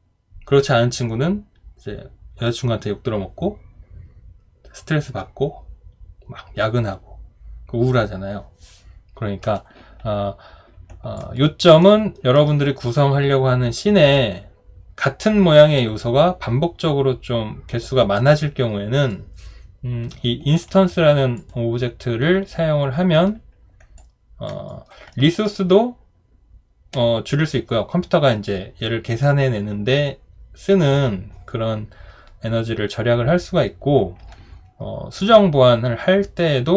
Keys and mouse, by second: 11.2 alt+click, 11.8 alt+middle click, 24.0 alt+click, 24.7 alt+right click, 25.1 alt+middle click.